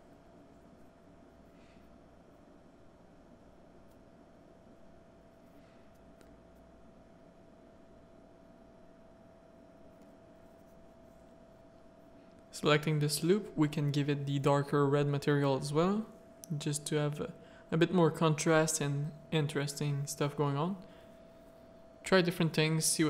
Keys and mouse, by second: 1.1 alt+a, 1.2-2.4 drag, 2.9 shift+click, 5.7 middle click, 7.3 Tab, 7.5 middle click, 7.9 z, 8.2 middle click, 8.9 3, 12.3 click, 12.9 middle click, 14.3 alt+click, 15.2 click, 15.9 Tab, 16.5 middle click, 16.7 z, 19.4 middle click, 22.0 middle click.